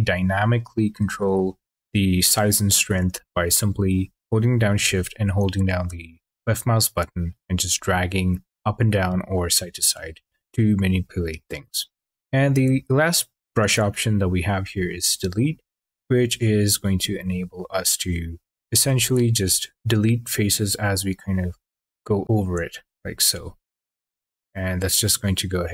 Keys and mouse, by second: 5.0 shift+click, 14.4 click, 17.0 shift+click, 19.7 shift+click.